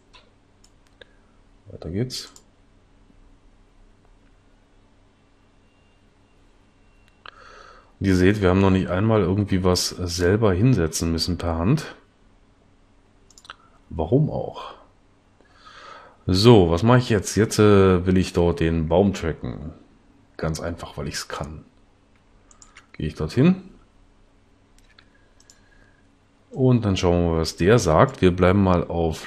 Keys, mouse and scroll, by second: 24.9 s.